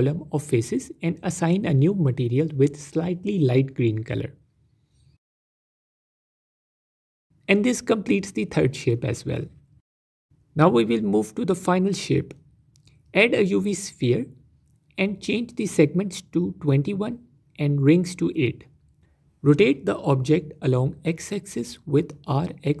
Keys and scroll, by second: 7.5 Tab, 11.4 shift+a, 19.4 F4, 20.4 r, 20.6 x, 20.8 KP_9, 20.9 KP_0, 21.0 KP_Enter.